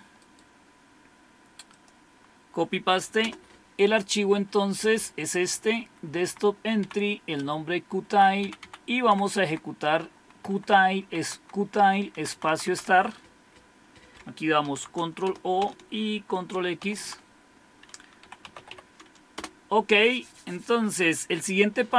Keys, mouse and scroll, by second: 0.2-1.7 right drag, 1.7-3.2 drag, 3.2 Return, 5.3 Up, 5.5 Up, 5.7 Up, 5.9 Up, 6.8 Down, 7.4 Right, 7.9 Right, 8.0 Right, 8.4 Down, 8.6 Down, 9.1 Left, 9.3 Left, 9.4 Left, 10.3 Right, 10.5 Right, 10.6 Right, 10.9 Right, 12.2 Right, 12.5 Right, 12.6 Right, 12.8 Right, 14.7 ctrl+o, 15.3 Return, 16.9 ctrl+x, 18.0-19.2 typing, 19.3 Return.